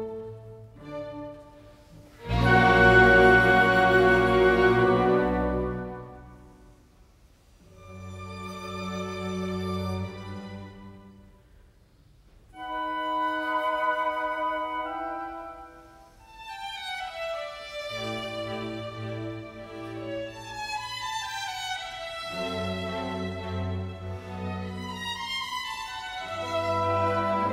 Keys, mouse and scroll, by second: 2.3-4.9 scroll up 1, 5.9-6.2 scroll down 1, 15.0 alt+click.